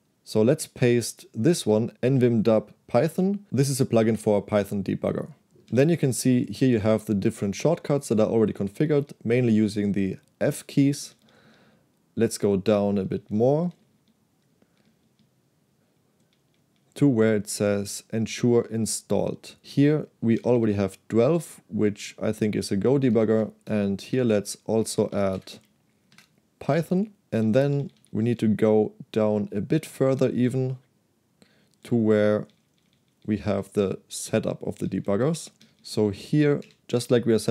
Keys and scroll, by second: 1.7 shift+v, 5.7-8.9 typing, 10.9-11.5 typing, 12.8-20.6 typing, 23.2-26.3 typing, 23.8 Return, 26.8 Escape, 27.4-29.5 typing, 30.5-33.2 typing, 34.9-36.6 typing.